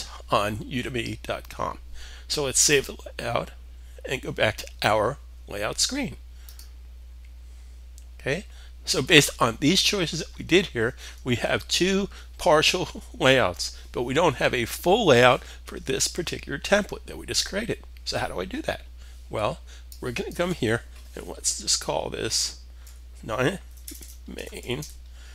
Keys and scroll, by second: 22.2 9, 23.8-25.3 typing.